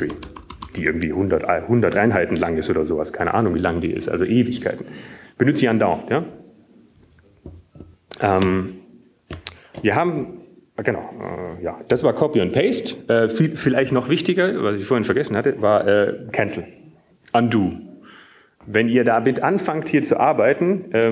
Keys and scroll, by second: 0.3-2.0 typing, 9.2 Up, 14.9 BackSpace.